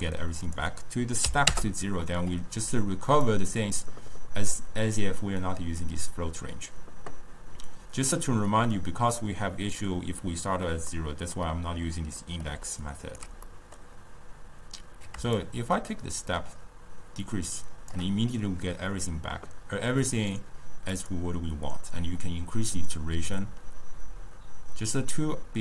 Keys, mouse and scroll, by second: 0.5-6.2 drag, 11.0-12.3 middle drag, 12.3 scroll up 1, 12.6 d, 12.9 right click, 13.6-15.5 middle drag, 15.5-18.5 shift+drag, 20.2-24.1 drag.